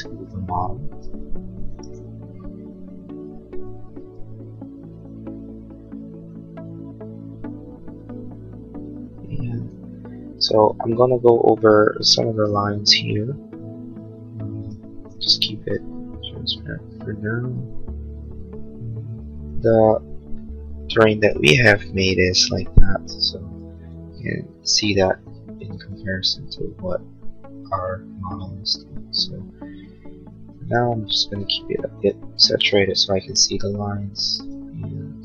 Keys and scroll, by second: 0.9 space.